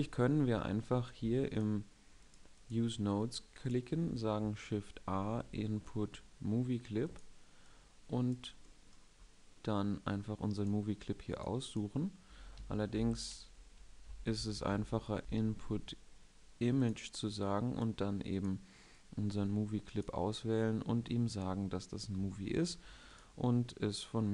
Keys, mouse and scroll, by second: 0.6 shift+a, 3.7 shift+a, 12.3 Escape, 13.8 x, 14.2 shift+a, 15.1 x, 15.1 shift+a.